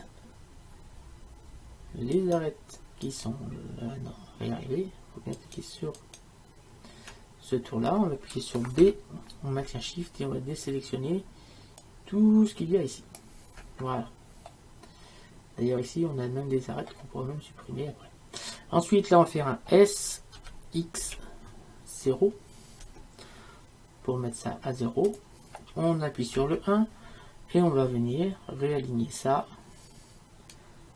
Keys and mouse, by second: 8.8 b, 14.5-20.4 middle drag, 20.4 s, 26.4 KP_1.